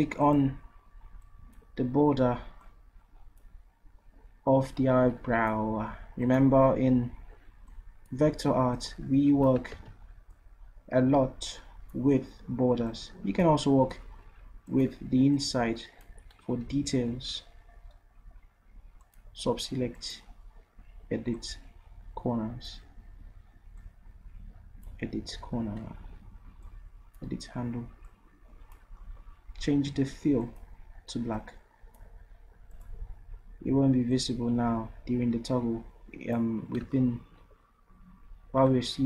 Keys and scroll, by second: 9.8 ctrl+z, 16.7 ctrl+z.